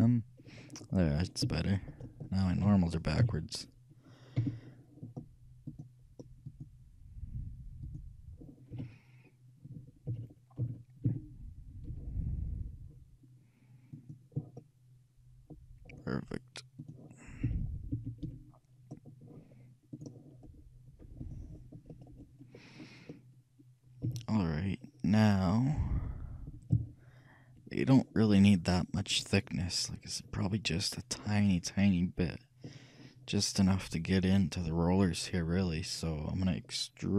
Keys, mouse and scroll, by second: 0.1 KP_3, 1.7 middle click, 2.7 a, 3.3 a, 4.5 t, 5.8-9.8 drag, 8.9 a, 10.2 a, 10.7 a, 11.2 t, 12.0 n, 14.1-15.6 drag, 14.8-16.6 middle drag, 16.9-18.6 drag, 17.6 t, 18.0 t, 18.3 n, 21.4-23.2 drag, 22.1-24.6 middle drag, 24.1 a, 24.9-26.6 middle drag, 26.8 KP_3, 28.1-29.8 middle drag, 30.4-36.4 middle drag.